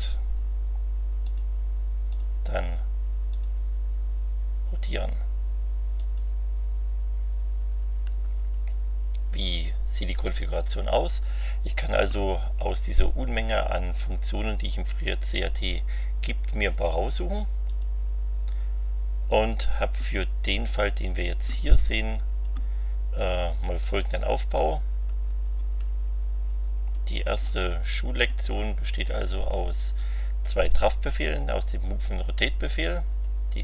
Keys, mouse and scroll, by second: 1.2 click, 2.1 click, 3.3 click, 5.9 click, 17.6 click, 19.3-22.6 drag, 23.9 click, 25.1-26.1 scroll up 4, 26.5 scroll down 2.